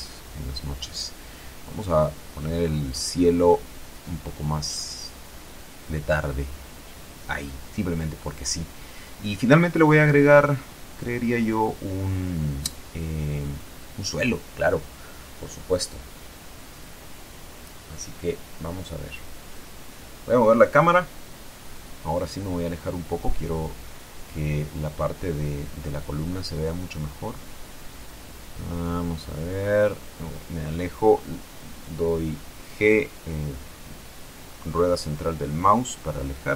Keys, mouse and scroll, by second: 0.8 click, 3.0 F12, 16.7 Escape, 18.3 KP_0, 20.1 right click, 22.0 g, 26.0 click, 28.8 g, 29.1 middle click, 33.7 click, 34.5 g.